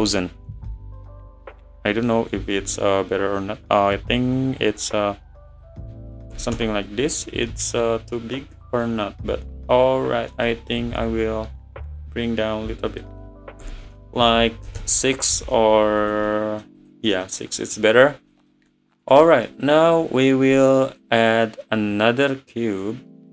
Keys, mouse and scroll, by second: 0.7 middle drag, 1.0 scroll up 2, 1.5-2.6 middle drag, 2.6 `, 3.1 scroll up 2, 4.0-4.6 scroll up 1, 4.6-7.6 drag, 7.6 middle drag, 7.8 scroll up 1, 7.9 scroll down 3, 8.1-8.5 middle drag, 8.5 click, 8.8-10.5 middle drag, 10.5 click, 10.7 `, 11.9-14.9 drag, 16.0 click, 16.3-16.8 middle drag, 16.8 click, 17.1-17.4 middle drag, 17.4 scroll down 1, 17.5-18.0 middle drag, 18.0 click, 18.3 middle click, 18.9 click, 19.3-19.9 middle drag, 19.9 click, 20.9 click, 21.9 click.